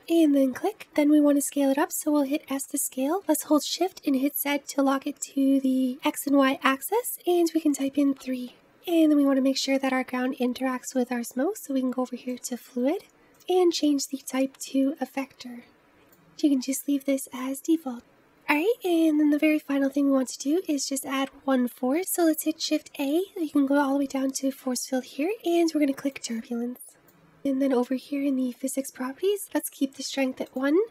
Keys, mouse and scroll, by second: 0.2-0.7 scroll down 3, 0.7-1.6 scroll up 3, 1.6-2.5 scroll down 1, 2.5 s, 7.0 s, 12.3-16.7 drag, 18.2 click, 19.2 scroll down 1, 19.5-21.3 scroll up 1, 21.9 shift+a, 22.5 shift+a, 30.4-30.9 drag.